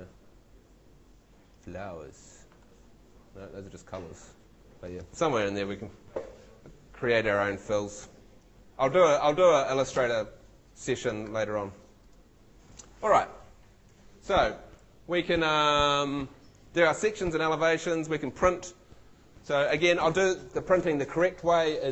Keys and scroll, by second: 8.0 shift+Escape, 10.0 shift+super+w.